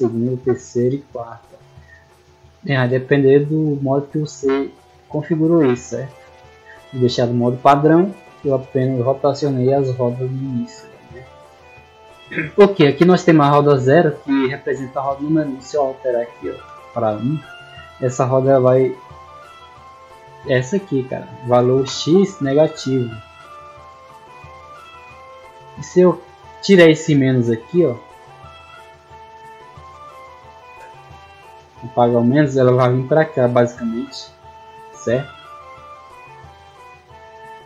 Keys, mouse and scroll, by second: 0.6 click, 1.0 click, 1.6 scroll down 2, 5.0 middle click, 13.4 click, 14.9 click, 20.3 right click, 25.5 click, 28.0-28.3 ctrl+scroll up 2, 28.6 ctrl+scroll up 2, 29.0 middle click, 29.8 middle click.